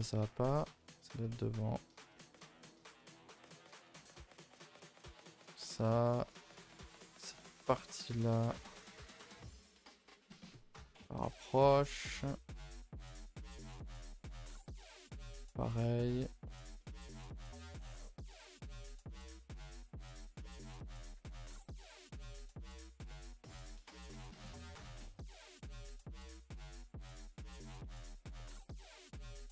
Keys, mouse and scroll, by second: 0.3 g, 2.1 middle click, 2.8 g, 3.6 click, 3.9-5.0 middle drag, 5.0 g, 5.5-6.8 middle drag, 6.8 click, 7.5 click, 7.9 g, 10.2-12.4 middle drag, 12.4 click, 12.7 shift+click, 12.9 shift+middle click, 13.3 g, 15.7 middle click, 16.5 click, 16.7 middle click, 17.2 g, 19.1-20.1 middle drag, 20.1 click, 20.4 middle click, 21.1 g, 22.8 click, 23.0 middle click, 23.9 g, 25.4-27.5 middle drag, 27.5 click, 27.8 middle click, 28.6 scroll down 2, 28.8 shift+middle click.